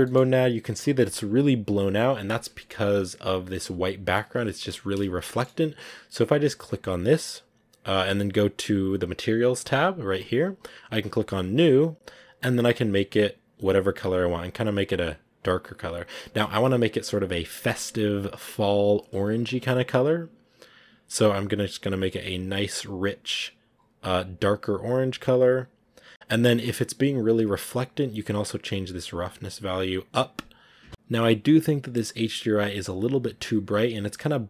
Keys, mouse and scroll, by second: 0.0 shift+middle click, 0.9-1.4 scroll down 1, 9.5-12.4 drag, 24.0 scroll up 1, 30.9 scroll up 1, 32.4 scroll up 1, 33.0 scroll up 1.